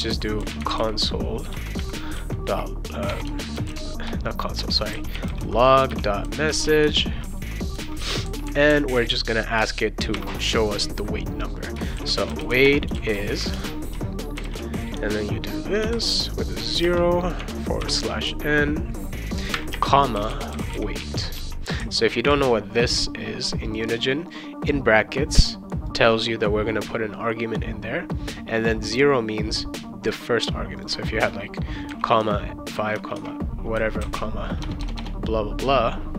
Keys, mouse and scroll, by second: 0.1-6.8 typing, 8.0 ;, 10.1 shift+', 11.7-14.4 typing, 15.8 0, 16.8 space, 17.4 \, 17.8 n, 19.5-21.1 typing, 21.3 ctrl+s, 23.8 click, 25.9 click, 28.6 click, 30.7 click, 31.6-35.0 typing.